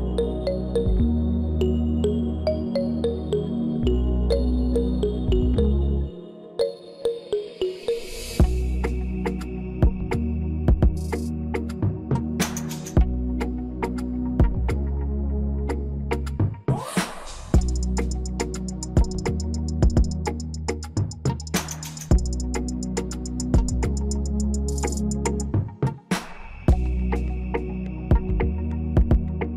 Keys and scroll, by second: 19.8 Return.